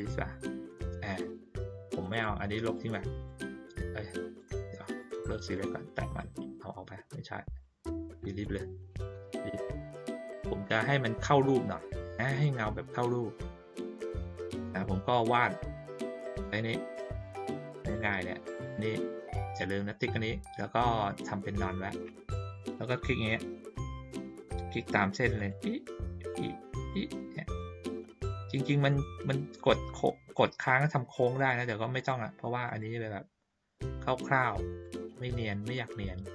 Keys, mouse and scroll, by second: 2.1 click, 2.6 click, 3.2-4.3 drag, 4.8 click, 5.5 click, 6.1-8.4 drag, 10.5 ctrl+middle click, 11.9 ctrl+middle click, 12.4 middle click, 13.7 ctrl+middle click, 14.6 middle click, 17.0 click, 25.3 click, 26.2 click, 26.8 click, 27.4 click, 28.9 click, 30.3 click, 31.3 click, 31.9 click, 32.6 click, 33.8 click, 34.8 click, 35.6 click.